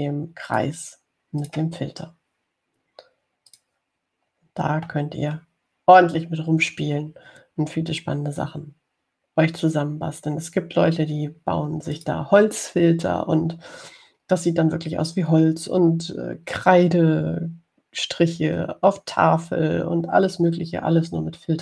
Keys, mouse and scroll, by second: 1.7 click, 2.6 click, 4.7 click, 9.4 scroll down 2, 11.0 scroll down 2, 11.5-11.9 scroll up 2, 13.1 click, 21.3 scroll down 2.